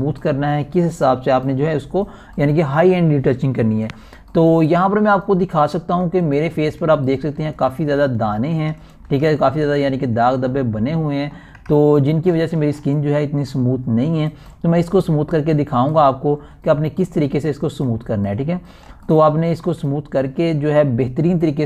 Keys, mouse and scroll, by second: 7.1 click, 8.0-8.4 ctrl+alt+scroll up 1, 8.8 click, 9.5 shift+scroll up 1, 10.2 alt+shift+click, 10.8 ctrl+alt+scroll up 1, 11.4 ctrl+click, 12.0 alt+shift+scroll up 1, 14.5 alt+scroll up 1, 16.4-16.8 scroll down 2, 19.4 scroll up 1, 20.6 alt+scroll up 1.